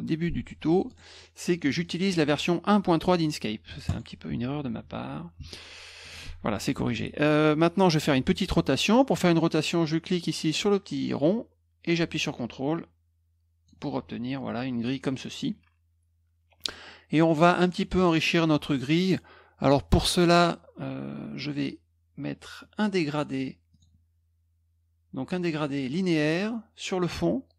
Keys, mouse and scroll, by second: 0.8 click, 1.8 click, 3.8 click, 11.2-13.6 drag, 17.2 middle click, 17.6 middle click, 23.7 click.